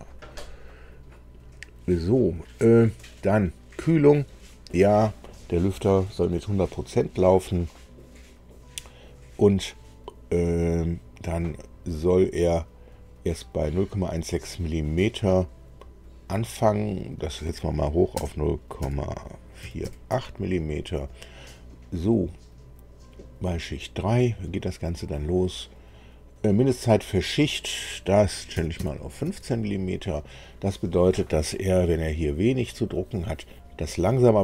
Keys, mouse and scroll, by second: 1.5-3.2 drag, 16.8 click, 18.1 KP_0, 18.7 KP_Decimal, 19.5 KP_4, 19.8 KP_8, 20.1 Tab, 27.6 click, 28.5 KP_1, 28.8 KP_5, 29.2 Tab.